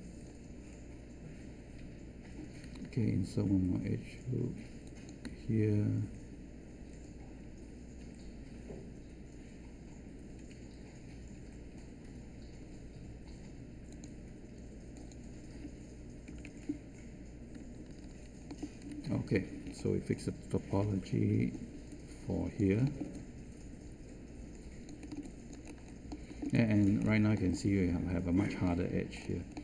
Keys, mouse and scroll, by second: 16.2 Return, 20.8 3.